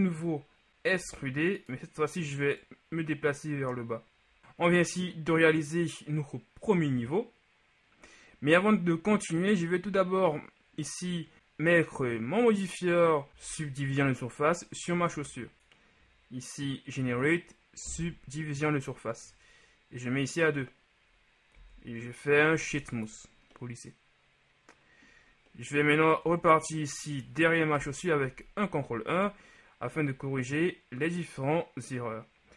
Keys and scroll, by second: 0.7 ctrl+z, 1.1 e, 13.6 Tab, 21.7 w, 26.4 Tab, 27.9 ctrl+KP_1.